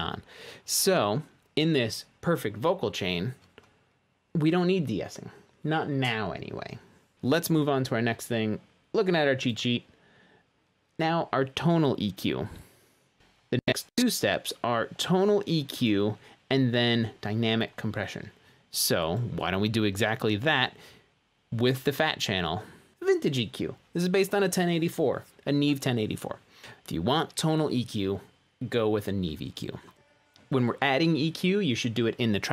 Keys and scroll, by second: 7.1 space, 12.9-13.6 typing, 14.1 Return, 30.0 space.